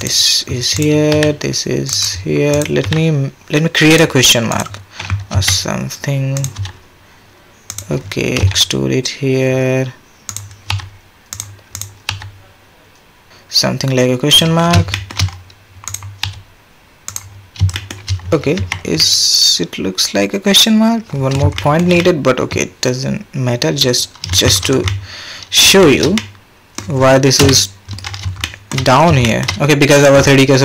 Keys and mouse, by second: 0.7 click, 1.1 g, 2.0 click, 2.8 g, 5.3 r, 6.6 g, 8.4 e, 10.7 g, 12.1 g, 13.3 g, 14.9 shift+click, 15.8 click, 16.2 g, 17.7 shift+click, 18.6 Tab, 19.0-21.2 middle drag, 21.6 shift+middle click, 22.0-22.3 middle drag, 22.4-23.9 middle drag, 24.0 middle drag, 24.5 shift+middle drag, 24.9-25.6 middle drag, 25.8 shift+middle drag, 26.2-26.7 middle drag, 27.4 KP_1, 28.4-28.7 shift+drag, 29.2 shift+drag.